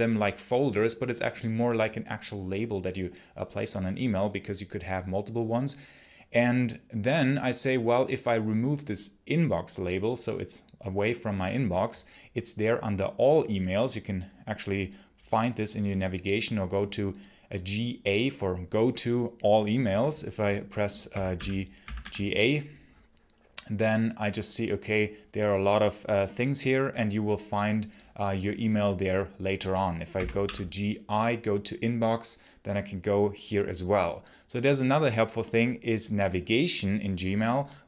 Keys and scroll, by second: 20.7-22.3 typing, 30.0 g, 30.2 i.